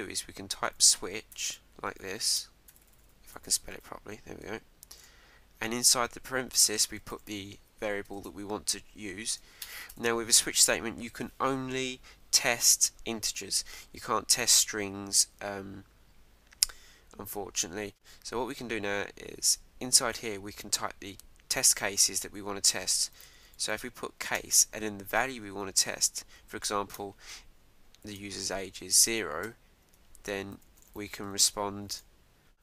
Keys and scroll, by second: 4.9 shift+(, 8.1 super+Return, 9.6 Return, 10.6 Up, 28.0 shift+:, 29.4 Return, 29.8 Tab, 32.3 shift+'.